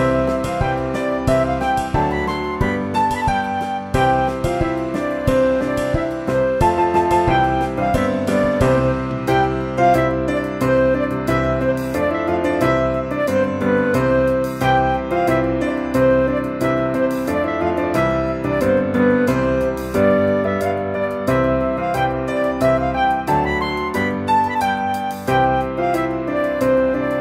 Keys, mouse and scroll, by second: 0.0 click, 0.5 click, 2.7 click, 4.4 click, 6.3 click, 6.8 click, 9.8 click, 10.2 click, 10.9 click, 11.4 Delete, 12.0 shift+a, 13.7 g, 14.6 click, 15.1 click, 16.2 click, 16.6 click, 17.9 click, 18.3-20.2 typing, 19.9 click, 22.0 click, 23.6 z, 24.2 click, 24.7 click, 25.8 click, 26.3 click.